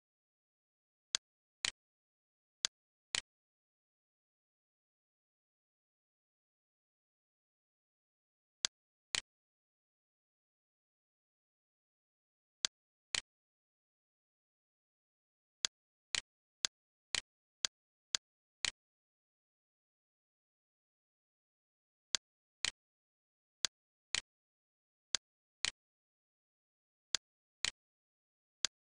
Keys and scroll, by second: 4.3 s, 5.4 r, 6.2 Escape, 7.5 super+space, 10.2-11.7 typing, 11.8 Return, 14.5 l, 17.4 Escape, 18.2 x, 19.3-21.0 typing.